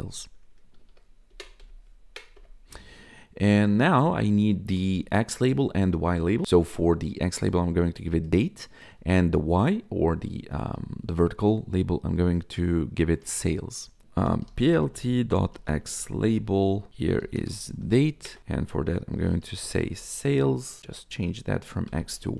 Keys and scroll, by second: 0.0-0.5 typing, 1.3 Left, 1.5 BackSpace, 1.9 Right, 2.3 Return, 14.3-20.2 typing, 18.2 alt+shift+Down, 18.4 ctrl+shift+Left, 20.6 ctrl+Left, 21.1 Right, 21.8 BackSpace, 22.0 y.